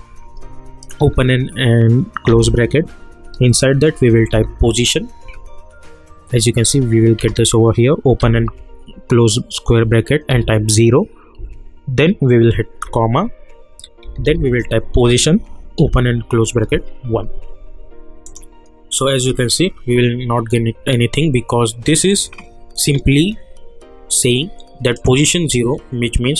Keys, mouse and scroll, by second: 1.0 [, 2.3 ], 3.3 Left, 3.8-5.2 typing, 7.2 Return, 8.2 [, 10.3 0, 11.4 Right, 12.8-17.1 typing, 14.9 Return, 18.2 click, 22.1 click, 24.9 click.